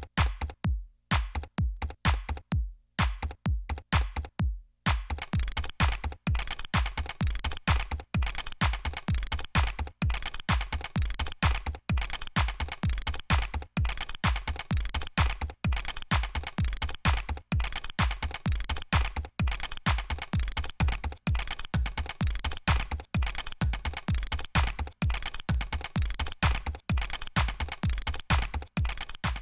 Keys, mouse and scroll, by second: 0.0 right click, 0.3 click, 0.3 right click, 0.5 middle click, 0.6 click, 1.4 right drag, 1.5 click, 1.7 right click, 2.3 middle click, 2.3 scroll down 2, 2.3 scroll up 2, 2.6 right click, 2.7 Return, 2.8 Return, 2.8 drag, 3.2 ctrl+z, 4.0 middle click, 4.1 Delete, 4.4 scroll down 1, 4.7 scroll up 1, 4.9 scroll down 1, 5.2 scroll up 1, 5.3 scroll down 1, 5.4 scroll up 1, 5.5 scroll down 2, 5.6 middle click, 5.8 right click, 5.9 middle click, 6.0 click, 6.2 middle click, 6.3 right click, 6.4 click, 6.5 right click, 6.5 click, 6.6 Delete, 7.0 Delete, 7.1 Return, 7.6 click, 8.5 click, 8.6 right click, 8.8 click, 8.8 right click, 9.3 middle click, 9.4 right click, 9.5 middle click, 9.6 right click, 9.6 click, 9.7 Delete, 9.8 click, 9.8 right click, 9.9 ctrl+z, 10.1 ctrl+z, 10.2 double click, 10.3 Return, 10.6 right click, 10.6 ctrl+z, 10.7 click, 10.9 Return, 11.1 right click, 11.2 click, 11.8-12.9 drag, 12.9 middle click, 13.1 drag, 13.1 middle click, 13.2 click, 13.2 right click, 13.6 click, 13.8 Delete, 13.9 click, 14.0 alt+right click, 14.1 alt+click, 14.2 alt+right click, 14.5 click, 14.7 Delete, 14.8 ctrl+z, 16.8 Delete, 18.5 Delete, 18.6 click, 18.9 right click, 19.2 double click, 19.3 Delete, 19.4 Return, 19.5 right click, 19.6 click, 20.4 ctrl+z, 20.6 ctrl+z, 20.7 right click, 20.9 ctrl+z, 21.2 right click, 21.3 click, 21.5 Return, 21.6 right click, 22.1-22.8 drag, 22.4 Delete, 23.3 right click, 23.4 double click, 23.7 Delete, 23.9 click, 24.0 middle click, 24.2 click, 26.5 Delete, 27.2 click, 27.4 click, 27.6 click, 28.8 right click, 29.0 right click, 29.2 right click.